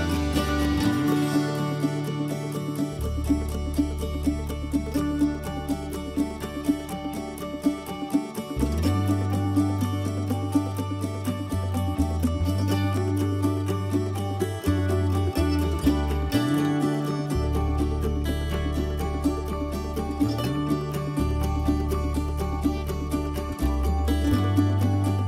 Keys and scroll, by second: 0.2 m, 6.2 o.